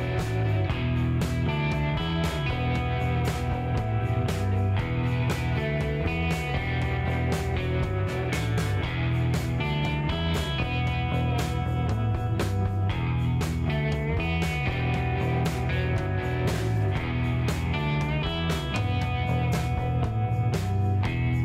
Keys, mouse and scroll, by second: 0.3 a, 1.8 g, 2.9-4.1 drag, 2.9 a, 4.1 g, 7.2 click, 8.1 click, 8.5 click, 9.7 click, 10.0 click, 13.4 middle click, 14.5 click, 15.0 middle click, 15.2 click, 15.2-15.7 scroll down 1, 15.9-16.5 scroll up 1, 16.5 scroll up 1, 16.7 click, 17.5 click, 18.8-19.9 middle drag, 19.9 KP_0, 20.3 middle click.